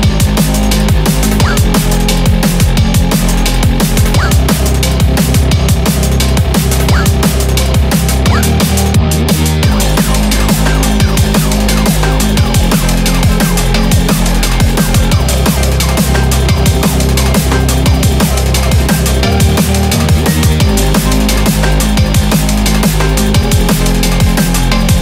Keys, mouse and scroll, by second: 0.2 scroll down 1, 0.6 click, 0.9 scroll up 2, 1.4 click, 2.2 click, 2.4 scroll up 3, 3.1 click, 3.4-3.7 scroll up 2, 4.0 click, 5.9 click, 6.7 KP_0, 10.2 click, 13.3 click, 20.2 click, 21.1 click, 22.4-23.1 scroll down 1, 23.1 click, 23.1 scroll down 1.